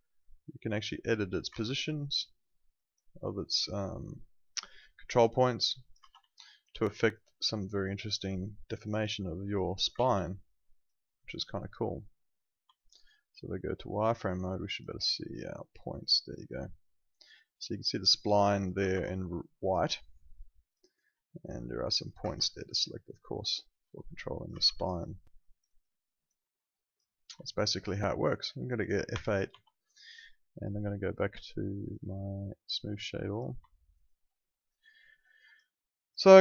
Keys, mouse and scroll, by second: 1.5 ctrl+z, 1.8 click, 6.1 z, 6.2 alt+click, 6.7 alt+right click, 7.0 alt+click, 9.9 ctrl+z, 10.3 alt+right click, 10.7 alt+click, 11.0 alt+middle click, 11.1 alt+right click, 12.7 alt+click, 15.1 alt+click, 15.6 alt+middle click, 15.8 alt+right click, 16.1 click, 18.8 ctrl+z, 19.1 alt+middle click, 19.3 alt+right click, 19.8 alt+click, 20.8 alt+right click, 21.3 click, 22.2 ctrl+z, 22.6 click, 24.5 ctrl+z, 24.7 alt+click, 25.0 alt+right click, 25.4 alt+click, 25.7 alt+right click, 26.0 alt+click, 26.4 alt+middle click, 26.6 alt+right click, 26.8 alt+click, 27.4 alt+click, 29.1 F7, 29.5 F8, 31.8 click, 33.7 alt+middle click, 33.9 alt+right click, 35.2 click.